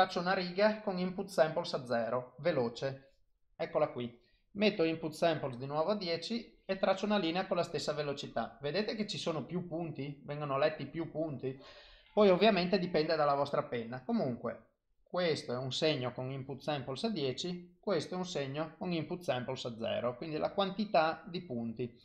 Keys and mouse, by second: 2.8 click, 4.7 click, 14.1 click, 16.4 click.